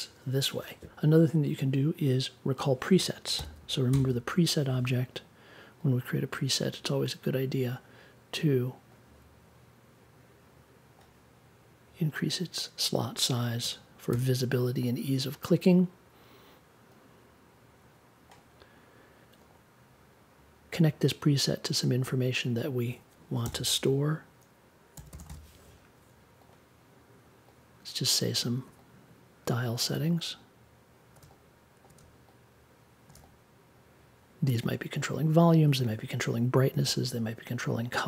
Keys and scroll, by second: 3.3-4.6 typing, 13.6 1, 14.1 6, 23.4 n, 24.7-25.7 typing.